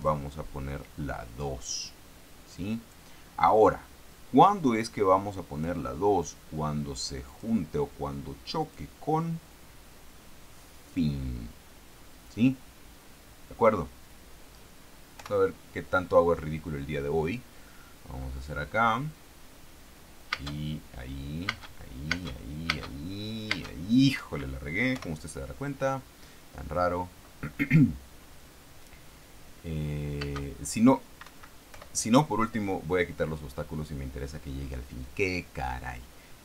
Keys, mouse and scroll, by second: 0.3 click, 1.7-3.5 drag, 5.2 click, 7.6 click, 9.0 click, 11.2 click, 15.5 p, 20.8 space, 21.9 space, 23.9 space, 25.3 p, 30.6 space, 31.6 Escape, 32.1 p.